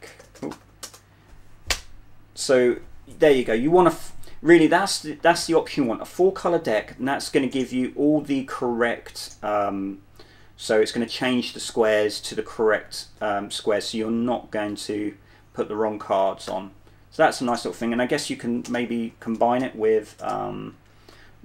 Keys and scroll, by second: 0.0-2.0 typing, 16.8 typing, 18.2 Up, 19.0-21.4 typing.